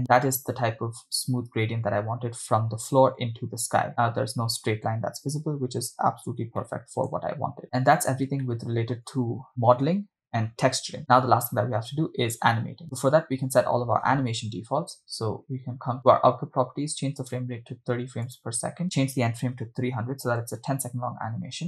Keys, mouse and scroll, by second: 0.7-1.2 scroll up 4, 5.2 scroll up 3, 5.9 scroll down 2, 6.8 shift+middle click, 7.6 scroll down 4, 8.4 scroll down 1, 8.6 shift+middle click, 16.0 click, 17.2-18.7 drag, 18.8-20.5 drag, 20.5 0, 21.5 scroll down 2.